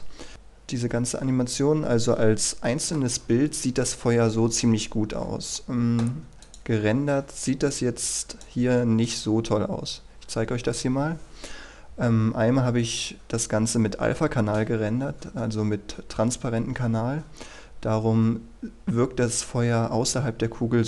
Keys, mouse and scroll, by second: 1.2 F11, 2.2-2.7 scroll up 1, 2.7 middle click, 6.5-7.6 drag.